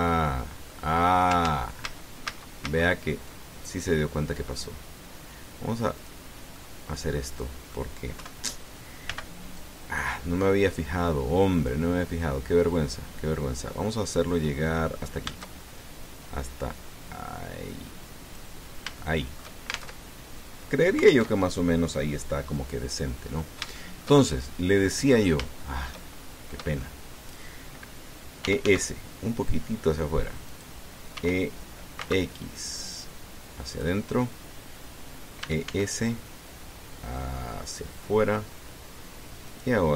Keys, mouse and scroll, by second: 1.8-2.1 scroll down 3, 2.2 ctrl+z, 6.8 click, 7.3-8.7 drag, 8.9 KP_1, 9.8 b, 10.4 click, 12.4-19.3 drag, 19.8 shift+middle click, 20.7 alt+shift+Tab, 22.1 alt+Tab, 24.0-24.4 scroll up 2, 24.5-25.7 shift+drag, 25.8-26.8 drag, 26.9-27.2 shift+scroll up 2, 27.6 click, 29.2 e, 29.4 s, 31.3 click, 31.9 e, 32.8 x, 34.5 click, 36.2 e, 36.5 s.